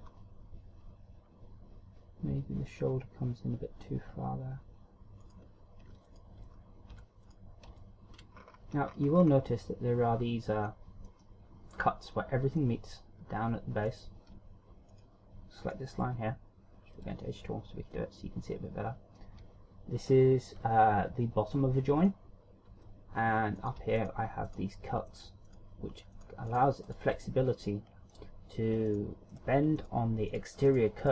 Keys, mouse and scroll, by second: 0.1-1.2 scroll down 3, 0.5 r, 5.9 right click, 6.6 right click, 7.0 Tab, 7.5 Tab, 7.8 right click, 8.3 Tab, 9.0-10.0 ctrl+scroll up 9, 11.3 middle click, 12.7 middle click, 14.5 right click, 15.5 shift+right click, 17.5 click, 18.5 middle click, 22.6 middle click, 24.2 right click, 24.6 shift+right click, 25.1 right click, 25.8 right click, 26.1 shift+right click, 26.7 shift+right click, 27.1 shift+right click, 27.5 shift+right click, 27.8 middle click, 29.5 shift+right click, 29.9 shift+right click, 30.3 shift+right click, 30.9 shift+right click.